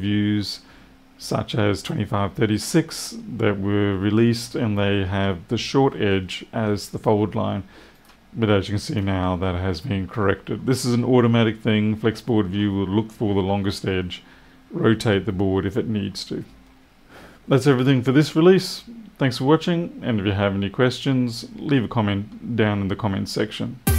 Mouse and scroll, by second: 7.8 click, 8.1 click.